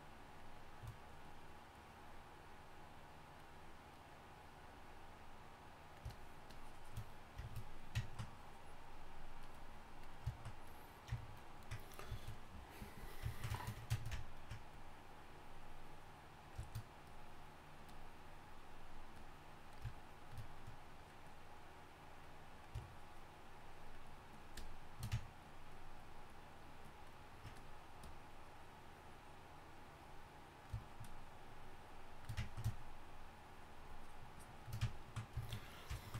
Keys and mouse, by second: 16.6-20.5 drag.